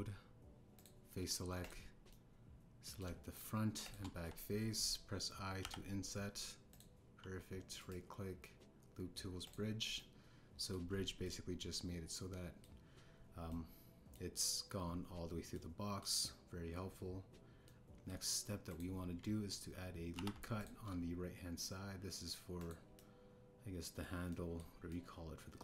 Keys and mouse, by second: 0.0 Tab, 1.7 click, 2.6 click, 3.1 click, 4.8 shift+click, 5.1 KP_1, 6.6 i, 8.7-9.6 drag, 10.9 middle click, 12.2-13.6 middle drag, 14.4 middle click, 16.5 middle click, 18.6 middle click, 19.6 click, 21.1 ctrl+r, 23.5-25.0 drag, 25.2 click.